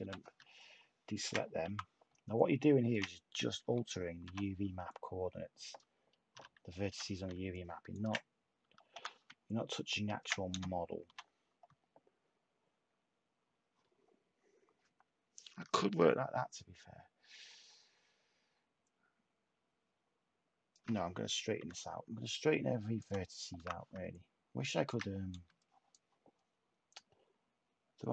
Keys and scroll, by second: 1.6 t, 3.6 /, 6.3-6.9 typing, 8.9 t, 10.5 /, 21.5 h, 23.5 t, 25.3 space.